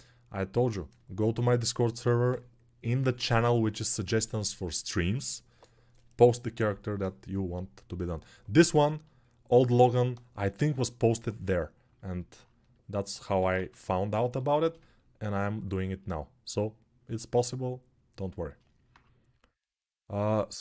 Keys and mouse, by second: 13.2 alt+q, 14.3 alt+shift+right click, 15.5-20.6 alt+shift+drag.